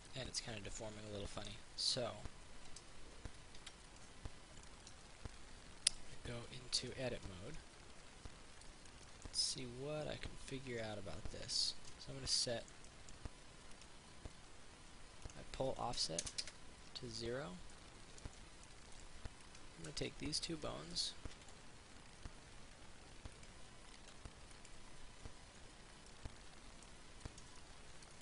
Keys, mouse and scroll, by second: 3.8 alt+g, 4.1 click, 4.9-6.9 middle drag, 6.9 right click, 7.5 Tab, 7.8 middle click, 12.1 Tab, 12.6 middle click, 14.0 right click, 15.5 click, 16.5 click, 17.9-19.5 middle drag, 19.7 shift+right click, 20.2 middle click, 21.6 ctrl+r, 23.6 click, 24.5 ctrl+r, 24.8 click, 25.8 Tab, 26.3 middle click, 27.5 Tab, 27.7 middle click.